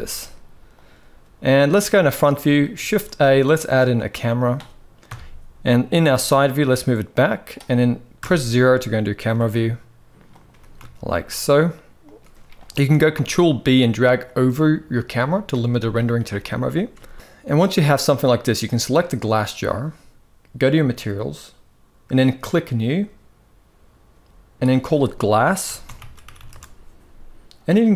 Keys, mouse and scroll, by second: 0.4 r, 1.6-1.9 shift+middle drag, 2.6 shift+a, 4.8 KP_3, 5.8 g, 7.9 KP_0, 9.0 g, 10.2 g, 12.8 ctrl+b, 16.9 ctrl+s, 17.1 ctrl+s, 20.5 click, 22.6 click, 24.5-26.2 drag, 26.1 s.